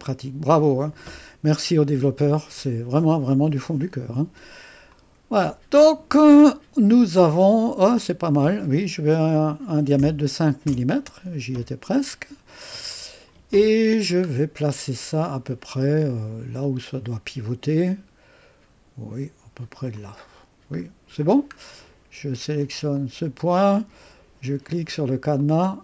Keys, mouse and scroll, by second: 4.9 click, 5.3 click, 10.0 5, 10.7 Return, 14.3-16.6 scroll down 1, 16.6-17.2 scroll down 1, 17.2 scroll down 1, 17.4-20.2 drag, 20.3-20.8 scroll down 1, 20.8-21.4 scroll up 1, 21.4-21.9 scroll down 1, 22.9 click, 25.4 click.